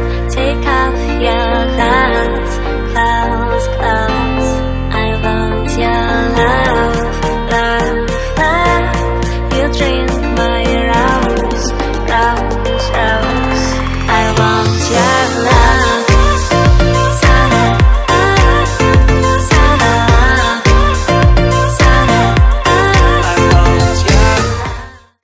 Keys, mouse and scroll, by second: 0.3 click, 1.6 click, 3.4 click, 4.3 click, 6.2 click, 8.6 click, 9.8 click.